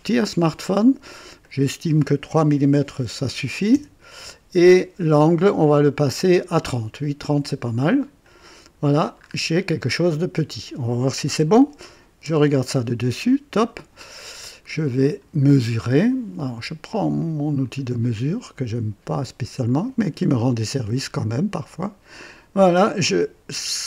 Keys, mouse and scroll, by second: 1.4 click, 2.8 KP_3, 3.7 KP_Enter, 8.2 click, 9.2-9.5 scroll up 2, 10.0-11.1 drag, 12.2 KP_2, 13.5 click, 14.1-14.5 scroll up 2, 14.7-15.3 right drag, 15.4 scroll up 2, 15.9 right click, 17.6 click, 19.6 click.